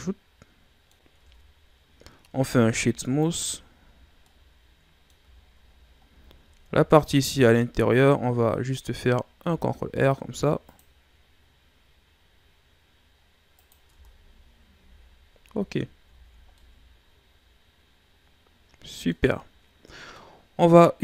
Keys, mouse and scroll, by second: 1.2 Tab, 2.5 w, 3.7 a, 4.0 scroll down 3, 4.3-5.4 middle drag, 5.4 shift+scroll down 4, 5.6-6.8 scroll up 16, 7.2 Tab, 7.6 middle click, 7.9-9.2 scroll up 1, 9.4 ctrl+r, 13.9 Tab, 14.3-15.1 scroll down 10, 14.8 a, 15.5 a, 16.2-16.5 shift+scroll up 3, 16.5-19.5 middle drag, 20.2-21.0 middle drag.